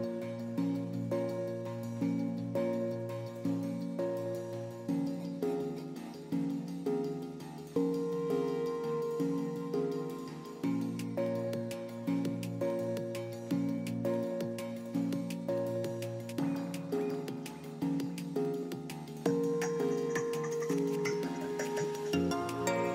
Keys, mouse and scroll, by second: 7.6 shift+s, 10.9 shift+s, 11.7 shift+s, 16.9 shift+s, 17.4 shift+s, 20.1 shift+s, 20.9 shift+s, 21.5 shift+s.